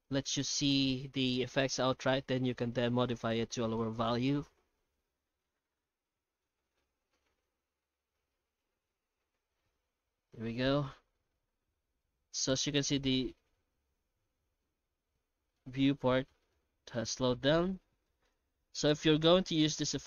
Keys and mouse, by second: 0.0 ctrl+space, 10.6 middle click, 12.3-15.9 middle drag, 16.1 shift+middle click, 16.7-17.4 middle drag, 18.2 middle click.